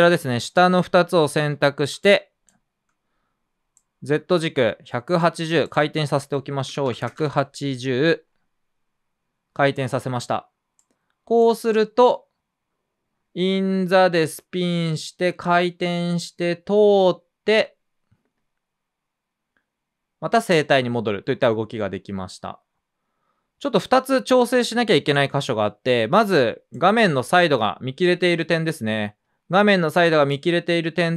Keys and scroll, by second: 1.3 r, 1.9 space, 2.4 space, 2.5 space, 6.4-7.5 typing.